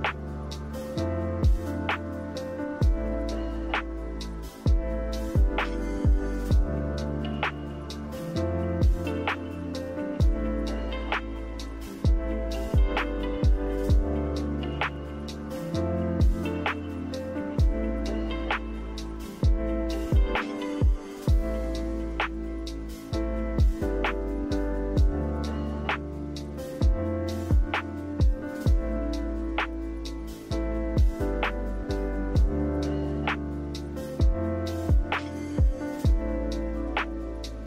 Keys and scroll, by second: 11.6 d, 12.9 z, 20.5 a, 27.2 Delete, 27.8 Delete, 35.6 Delete.